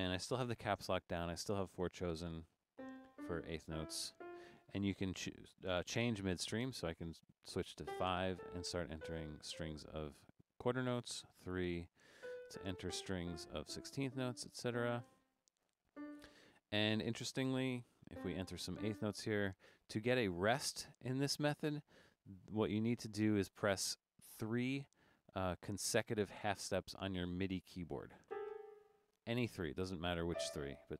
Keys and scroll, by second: 6.6 5, 11.2 3, 17.8 4.